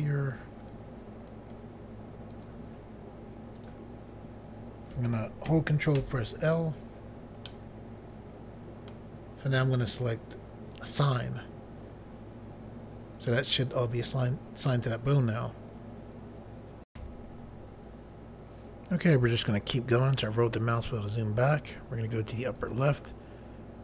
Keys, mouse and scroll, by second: 1.3 click, 2.3 click, 3.6 right click, 6.0 ctrl+l, 7.5 middle click, 10.7 click, 16.9 Pause, 19.1 scroll down 2, 22.5 click.